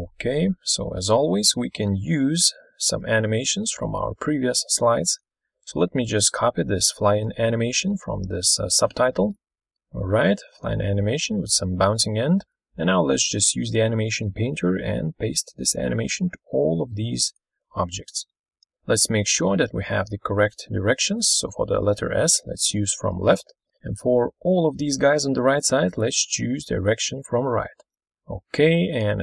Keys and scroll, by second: 1.3 ctrl+super+Right.